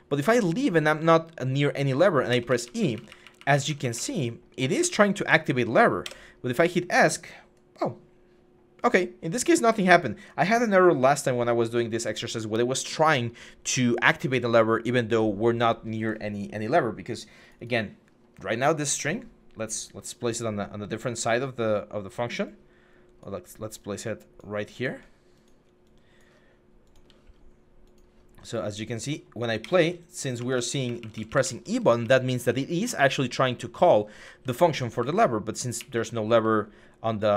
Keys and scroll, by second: 0.0-0.8 typing, 1.8-4.6 typing, 5.8 Escape, 29.4-37.3 typing.